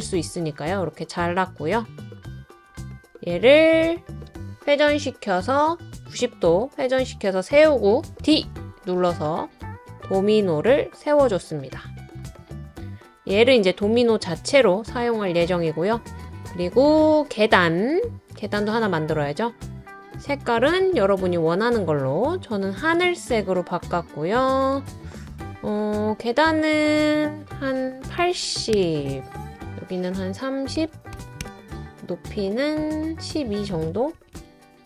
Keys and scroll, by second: 4.5 typing, 8.2 d, 27.8-28.7 typing, 28.7 Return, 30.5-31.6 typing, 33.9-34.6 typing.